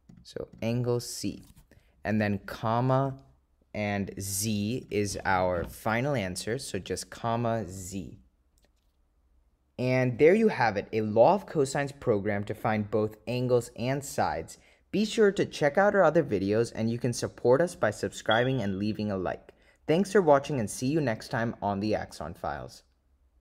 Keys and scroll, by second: 0.2 ., 0.7 0, 3.2 ,, 7.8 2.